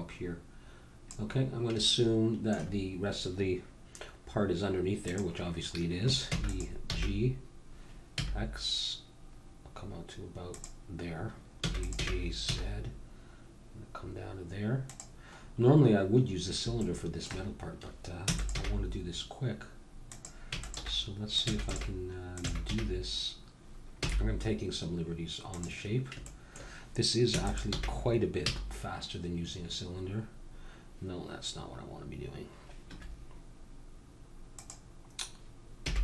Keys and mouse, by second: 1.8 middle click, 5.1-6.8 drag, 6.2 e, 6.8 g, 11.5 e, 12.0 g, 15.5-18.8 middle drag, 18.4 e, 18.5 g, 20.5-22.5 typing, 27.3 e, 27.7 g, 35.8 g.